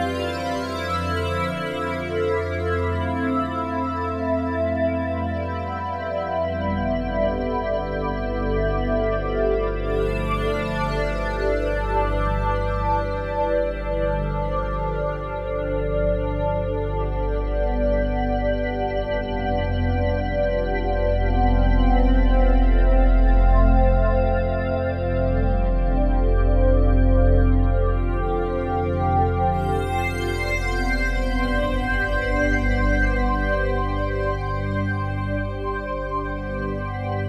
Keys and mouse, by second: 10.9 click, 11.6 click, 13.9 alt+click, 14.5 ctrl+alt+click, 15.1-21.1 ctrl+alt+shift+drag, 21.4 click, 22.3 click, 23.5 g, 26.8 Escape, 27.5 alt+click, 28.9 click, 29.9 g, 32.7 Escape, 33.3-37.2 alt+drag.